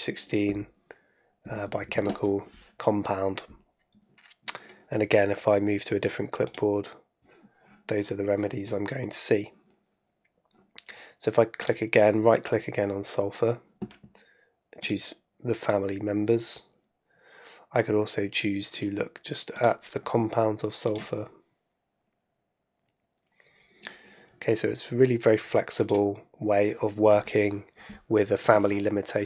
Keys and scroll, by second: 0.9 super+Right, 1.4 super+Left.